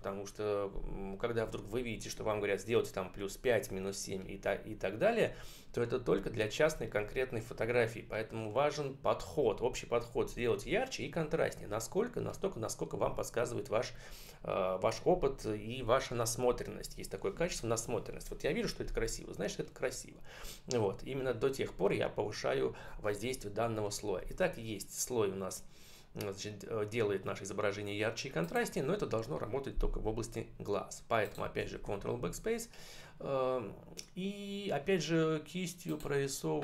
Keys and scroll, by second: 31.5 ctrl+BackSpace.